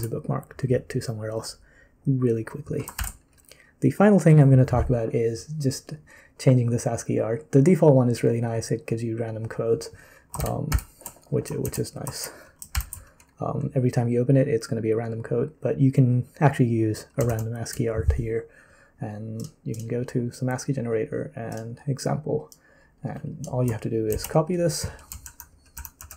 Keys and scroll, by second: 3.0 ctrl+n, 3.6 ctrl+n, 3.6 v, 10.4 ctrl+m, 10.7 ctrl+m, 11.6 ctrl+c, 12.7 ctrl+n, 17.3 super+l, 24.1 ctrl+c, 25.2 super+;, 25.7 super+;, 26.0 super+l.